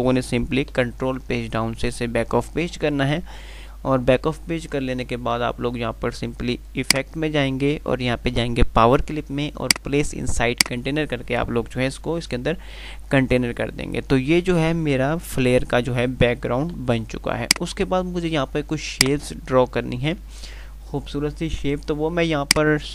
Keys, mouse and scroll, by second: 1.0 Page_Down, 6.8 click, 9.9 click, 17.0 F3, 17.9 click, 18.7 F2, 19.2 click, 19.4-20.1 F2, 22.6 click.